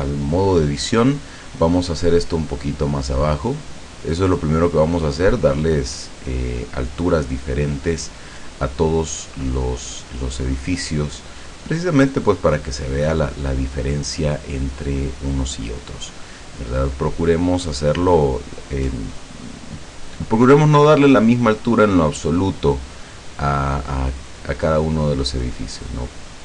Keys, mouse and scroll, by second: 1.0 right click, 2.1-4.2 drag, 4.7 right click, 5.3-7.0 drag, 7.0 middle click, 8.3 click, 8.9 click, 10.0 click, 10.8-12.0 drag, 13.0-14.5 middle drag, 15.2 click, 16.0 click, 17.2 right click, 17.9 click, 19.1 right click, 20.2 click, 21.6 right click, 22.4-23.6 drag, 24.2 right click, 24.9 click, 25.7 right click, 26.3 click.